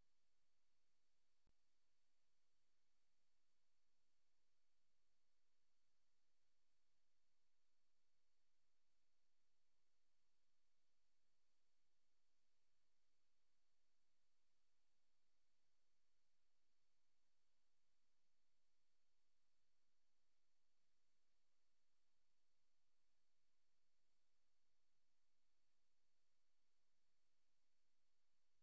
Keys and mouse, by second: 2.1 click, 4.1 click, 4.9 click, 5.6 click, 8.0 click, 8.9 click, 9.4 click, 9.6 click, 9.9 click, 10.3 click, 10.9 click, 11.3 click, 14.3 click, 14.7 click, 15.7 click, 19.3 click, 21.3 click, 23.3 ctrl+z, 23.5 ctrl+z, 25.0 click, 25.8 click, 26.8 a, 27.8 g.